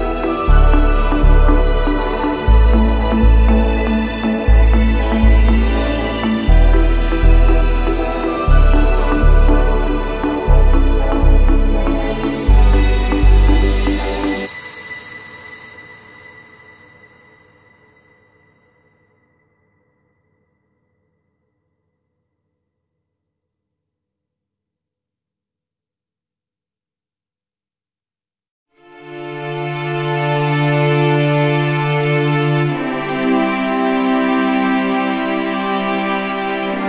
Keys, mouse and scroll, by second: 0.6 click, 2.9 ctrl+j, 4.4 middle click, 5.2 click, 5.9 right click, 7.2-8.4 drag, 8.6-11.3 drag, 11.3-13.2 scroll up 2, 12.4 ctrl+j, 13.2 scroll up 1, 13.7 a, 14.2 click, 14.9 q, 15.2 q, 16.0 click, 16.2 middle click, 16.3 middle click, 16.7 middle click, 17.1 middle click, 17.3 middle click, 18.5 click, 19.4 shift+click, 20.5 click, 21.6 click, 22.9-24.1 scroll, 24.7 click, 25.2 shift+click, 26.3 click, 27.1-29.8 typing, 28.8 click, 31.2-31.8 scroll, 34.7 alt+scroll, 35.6 alt+middle click.